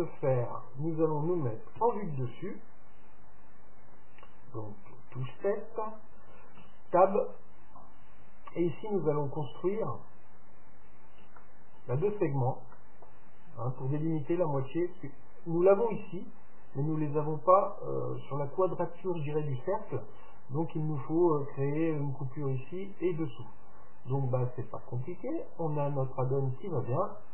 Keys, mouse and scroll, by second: 4.9 KP_7, 6.6 Tab, 11.4-14.7 middle drag, 25.5-27.3 drag.